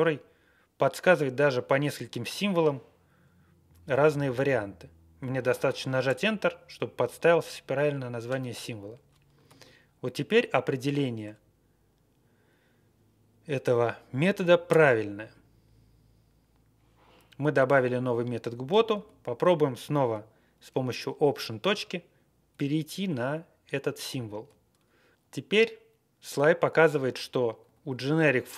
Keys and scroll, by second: 6.0 Return, 9.4 ctrl+e, 14.6 Return, 17.7 Up, 17.8 Up, 18.0 Up, 18.1 Up, 18.6 alt+f, 24.0 alt+., 26.9 Down, 27.1 Down, 27.6 Up, 27.8 Right, 28.1 Right, 28.1 Right, 28.2 Right, 28.2 Right, 28.3 Right.